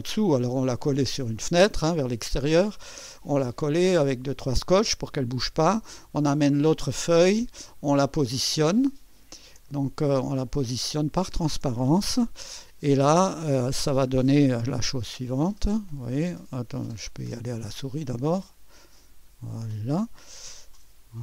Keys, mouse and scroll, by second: 6.0-7.2 middle drag, 7.8-8.3 scroll up 4, 8.9-9.3 ctrl+scroll up 2, 9.7 ctrl+middle click, 10.5-11.0 ctrl+scroll up 4, 11.1 ctrl+scroll down 2, 12.8-14.2 middle drag, 14.8 Left, 17.1-20.0 drag, 20.5 Down.